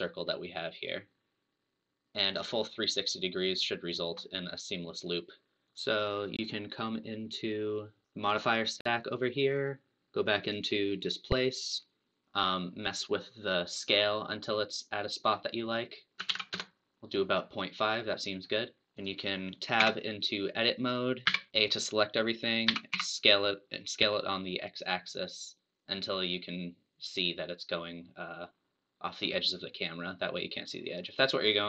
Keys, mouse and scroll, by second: 3.1-5.8 drag, 5.7 n, 8.0 click, 9.4-10.9 drag, 11.8-14.8 drag, 16.1-18.4 drag, 18.4 scroll up 1, 19.0 click, 19.8 Tab, 21.2 a, 22.9 s.